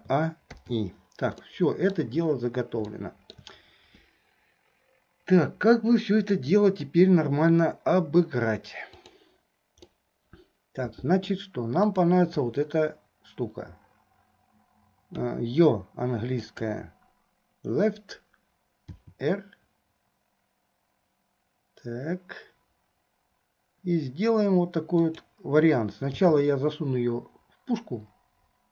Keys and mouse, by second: 0.2 a, 0.9 i, 1.6 middle click, 3.0 shift+middle click, 6.4 middle click, 9.0 click, 10.0-11.6 middle drag, 12.0-19.1 drag, 19.1 r.